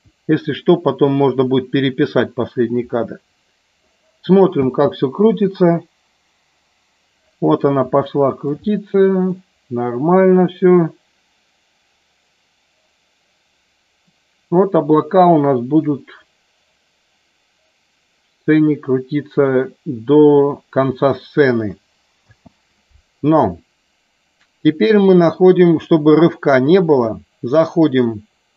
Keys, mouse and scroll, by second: 2.8 middle click, 4.7 space, 8.1 shift+middle click, 8.7 middle click, 22.3 space, 27.9-28.5 drag.